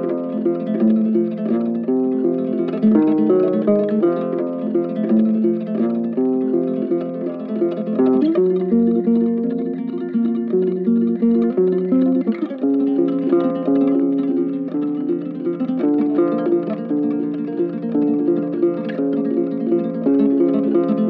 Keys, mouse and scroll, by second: 1.4 click, 1.6 scroll up 5, 1.8 click, 2.1 r, 3.4 click, 3.9 r, 4.9 click, 5.5-6.1 typing, 6.6-7.9 drag, 7.9 space, 9.1 space, 9.9 shift+click, 10.3 scroll down 2, 10.4 middle click, 10.5 shift+click, 10.9-11.4 scroll up 3, 11.4 ctrl+p, 11.6 r, 12.0 scroll down 2, 12.3 click, 13.1 ctrl+p, 13.2 click, 13.4 g, 13.6 Left, 13.8 r, 14.0 space, 14.3 KP_0, 14.4-14.9 scroll up 7, 17.3 space, 17.4 click, 18.6 space.